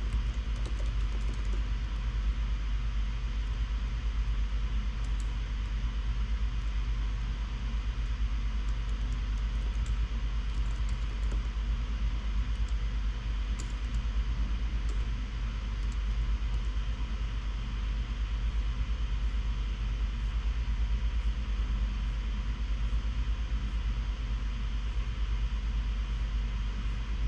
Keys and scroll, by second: 0.0-2.3 typing, 5.3 Tab, 5.5-6.2 typing, 7.3 Escape, 7.5 Escape, 9.7-12.8 typing, 12.8 Return, 13.9 Tab, 13.9-16.6 typing, 16.9 Tab.